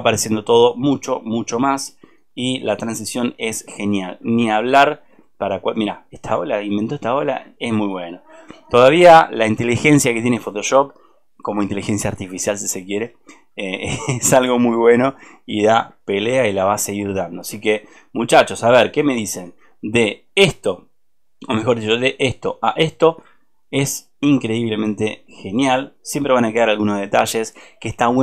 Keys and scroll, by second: 7.5 ctrl+space, 13.8 ctrl+space.